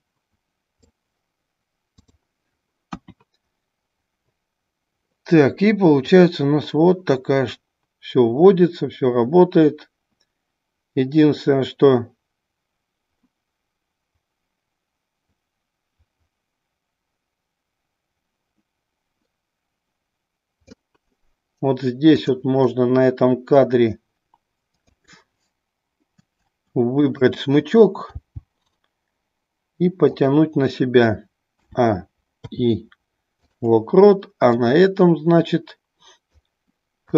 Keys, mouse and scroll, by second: 6.2-20.9 drag, 22.1 click, 24.7-26.0 drag, 34.7-36.6 drag.